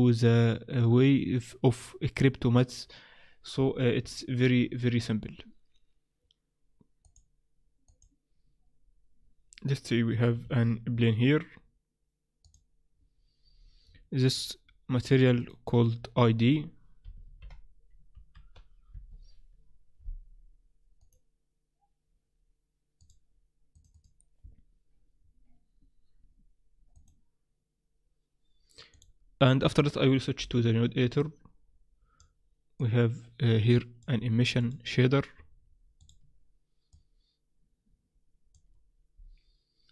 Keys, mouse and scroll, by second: 7.5 click, 10.5 shift+a, 14.4 click, 15.1 click, 29.0 click, 30.4 n, 31.2 click, 32.8 click, 36.9 click.